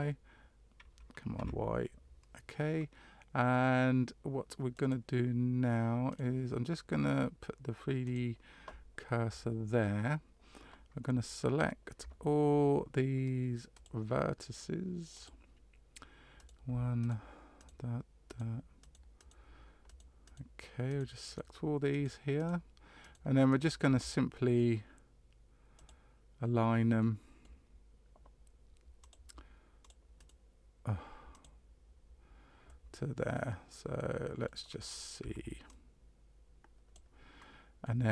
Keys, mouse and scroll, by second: 6.1 right click, 8.0 click, 11.0 middle click, 13.7 click, 15.1 click, 16.3 right click, 17.0 shift+right click, 17.5 shift+right click, 18.2 right click, 18.8 shift+right click, 19.1 shift+right click, 19.8 shift+right click, 20.2 shift+right click, 20.9 shift+right click, 21.2 shift+right click, 21.9 shift+right click, 22.3 shift+right click, 23.0 shift+right click, 23.5 shift+right click, 24.1 middle click, 25.7 click, 27.0 middle click, 29.0 click, 29.8 click, 30.2 right click, 31.3 click, 32.6 middle click, 33.9 middle click, 35.2 c.